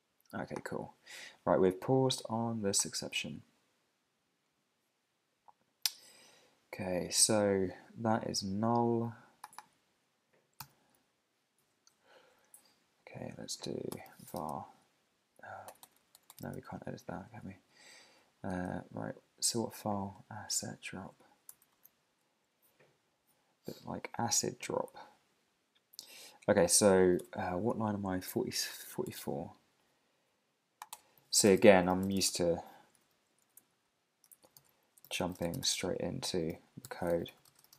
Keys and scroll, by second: 10.6 super+c, 10.9 Left, 12.4 Up, 13.9 Return, 16.5 super+Tab, 20.2 super+Tab, 20.5 super+`, 21.6 ctrl+alt+super+Up, 22.8 ctrl+alt+super+Up, 23.8 ctrl+alt+super+Up, 27.3 super+Tab, 30.9 Return, 33.0 Down, 33.6 alt+Right, 34.3 alt+shift+Right, 34.5 super+c, 34.7 Up, 35.0 super+v.